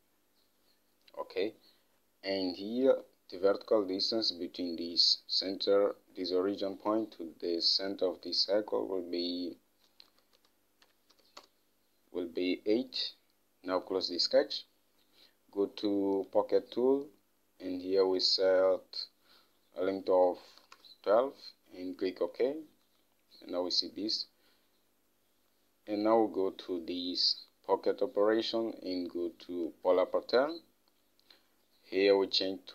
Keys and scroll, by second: 0.0-0.1 typing, 1.5-2.3 typing, 10.1-12.0 typing, 20.8-21.7 typing.